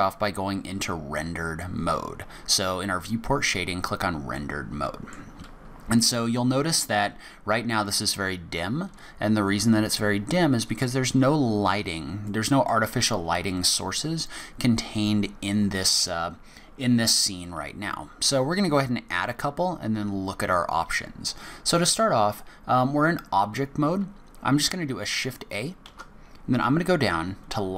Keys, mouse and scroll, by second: 3.4 click, 4.4 middle click, 12.3 middle click, 25.8 shift+a.